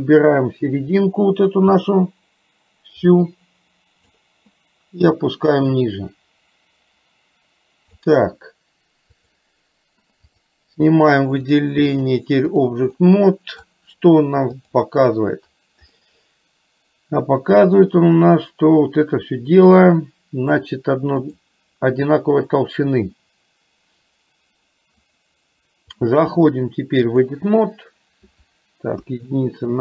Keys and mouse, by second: 0.0-4.3 drag, 5.3-8.1 drag, 9.4 click, 12.0 click, 13.1 middle click, 16.0-20.6 middle drag, 21.4 click, 26.1-27.5 drag, 29.1 KP_1.